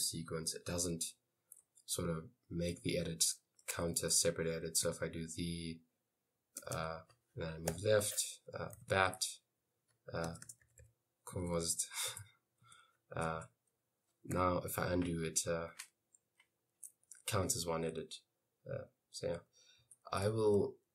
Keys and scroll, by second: 2.9 i, 4.0-6.8 typing, 7.7 Left, 8.6-15.6 typing, 10.7 Left, 10.9 Left, 19.2-20.9 typing.